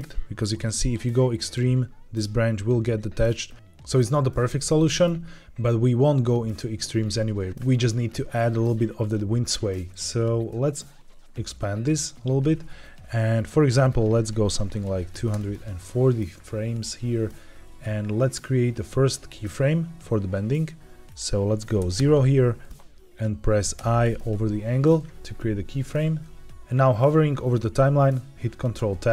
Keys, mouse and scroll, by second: 0.3-1.5 drag, 3.4 click, 3.8 middle click, 4.7 middle click, 7.5 shift+middle click, 7.5 scroll down 1, 10.4-12.0 drag, 13.7-15.2 drag, 21.0 click, 23.7 i, 28.7 ctrl+Tab.